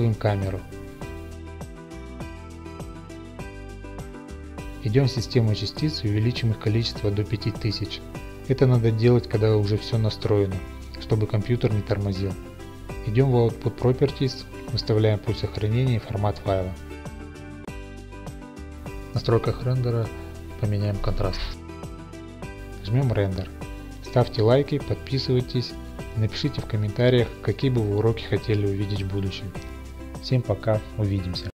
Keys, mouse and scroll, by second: 0.6 click, 0.6 middle click, 1.2 g, 2.7 click, 3.5 z, 3.7 click, 5.2-6.5 drag, 7.9 typing, 9.3-10.3 typing, 13.6 click, 14.8 click, 15.4 click, 15.9 click, 18.1 click, 18.8 middle click, 20.2 middle click, 20.7 scroll, 20.9 click, 21.8 click, 23.8 click, 24.4 ctrl+f, 30.0 scroll, 30.6 scroll up 1, 30.7 scroll.